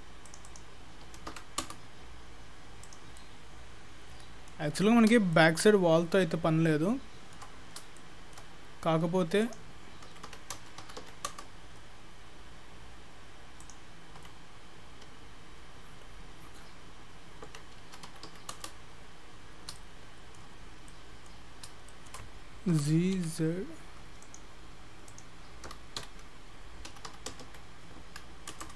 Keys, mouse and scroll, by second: 0.5 click, 2.9 click, 3.2 middle click, 5.0-5.4 scroll up 3, 5.4 shift+middle click, 7.6 scroll up 2, 8.0 shift+middle click, 8.5 scroll down 2, 9.4 click, 13.6 click, 19.3-19.7 scroll down 1, 19.8 shift+middle click, 20.6-21.5 scroll down 3, 20.9 middle click, 21.5-21.9 scroll up 3, 21.9 shift+middle click, 22.7 g, 23.2 z, 25.1 click, 25.7 g.